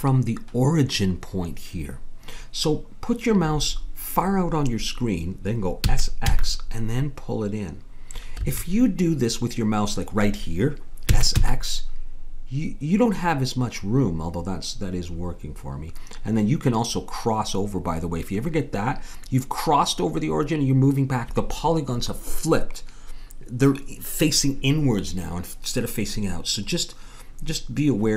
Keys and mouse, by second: 5.8 s, 11.1 s.